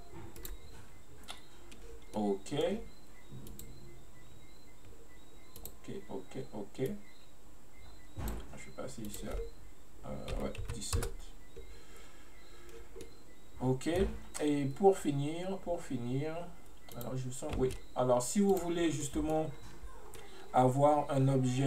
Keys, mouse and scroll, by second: 2.2-3.6 middle drag, 3.6-12.1 drag, 13.1-16.1 middle drag, 17.0 click, 17.7 space, 18.6 click, 18.9 scroll down 1, 19.1-19.6 middle drag, 19.6-20.1 scroll up 2, 20.1 scroll down 1, 20.2-21.6 middle drag.